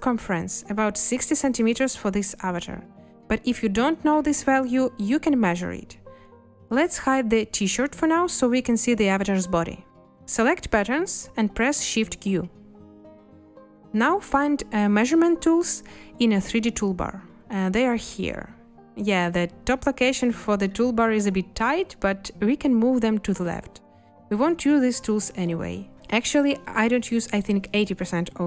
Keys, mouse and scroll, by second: 12.1 shift+q.